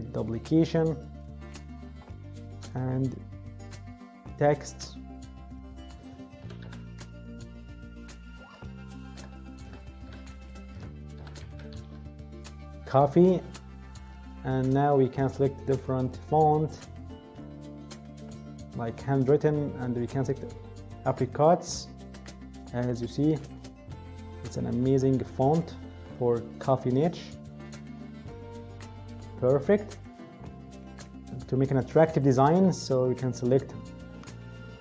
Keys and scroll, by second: 6.1-7.1 typing, 8.2-12.3 typing, 9.6 Caps_Lock.